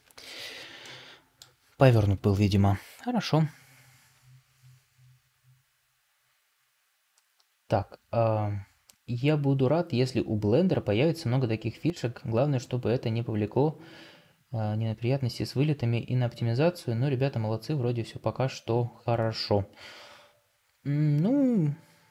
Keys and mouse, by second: 1.2-3.2 middle drag.